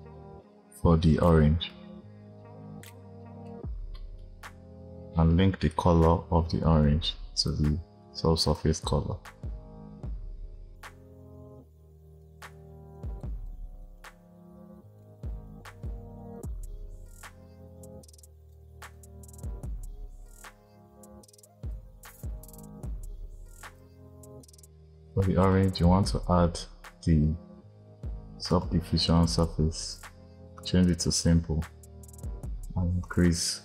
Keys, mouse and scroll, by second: 1.7-3.8 drag, 3.8-4.3 middle drag, 4.3-5.5 scroll down 1, 5.5 drag, 11.2-11.6 scroll down 2, 12.2 click, 13.7-14.8 drag, 15.4 click, 18.4 click, 18.8-20.0 drag, 20.1 click, 21.8 scroll up 2, 22.6 click, 23.7 click, 24.3 click, 30.4 click, 32.9-33.6 drag.